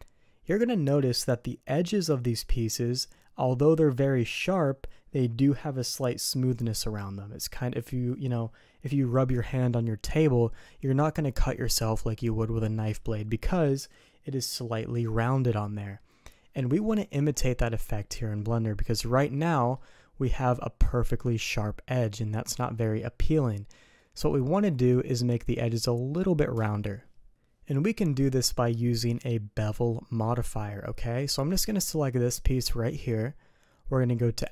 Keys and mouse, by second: 18.0-18.8 middle drag, 19.3-19.7 middle drag, 23.9-24.2 middle drag, 27.9 middle click, 31.8 click.